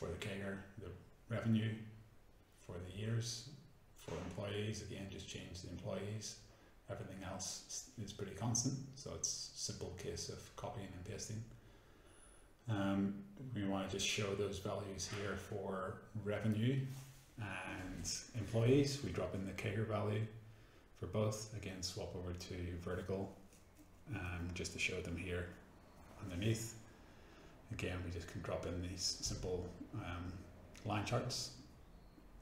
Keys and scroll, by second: 4.6 Return, 12.0 F9.